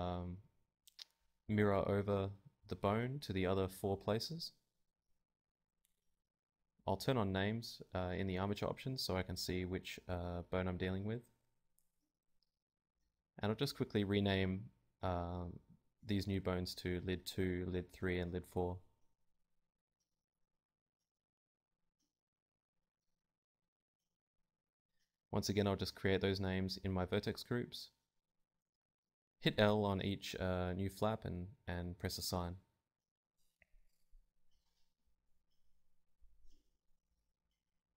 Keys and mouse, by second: 0.9 shift+d, 1.6 right click, 1.6 ., 1.6 s, 3.5 z, 5.3 Tab, 8.1 click, 8.6 Tab, 9.0 z, 9.8 l, 10.0 z, 14.1 Tab, 14.6 click, 14.7 ctrl+Tab, 17.8-19.0 right drag, 19.2 click, 20.6-21.9 right drag, 21.1-22.7 drag, 22.7 Tab, 23.8-25.7 drag, 24.5 Tab, 24.6 Tab, 24.8 Tab, 26.3-28.0 drag, 27.5 Tab, 27.8 Tab, 28.0 Tab, 28.1 Tab, 28.5 z, 29.0 l, 30.1 l, 30.2 z, 33.0 Tab, 33.6 Tab, 33.8 z, 34.3 l, 36.0-37.1 drag, 37.1 Tab, 37.3 click, 37.3 z, 37.7-37.9 right drag, 37.8 ctrl+Tab.